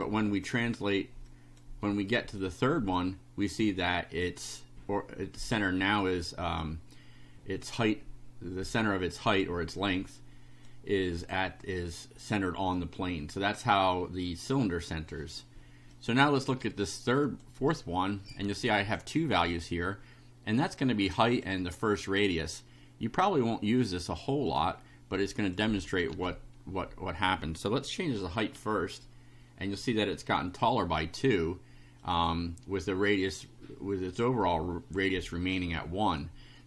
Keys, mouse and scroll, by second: 1.3 click, 1.8 right click, 3.0-4.4 drag, 9.9 click, 12.8 click, 15.9 click, 17.2 click, 18.8 click, 20.8 click, 23.3-24.3 drag, 24.5 click, 25.2 click, 26.2 2, 28.6 F5, 32.1 click.